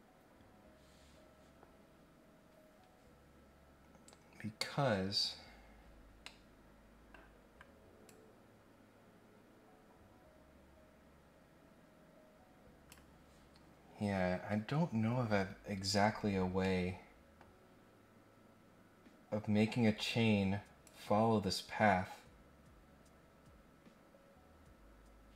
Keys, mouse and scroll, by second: 6.2 middle click, 8.0-12.9 drag, 16.6 middle click, 20.8-25.3 drag.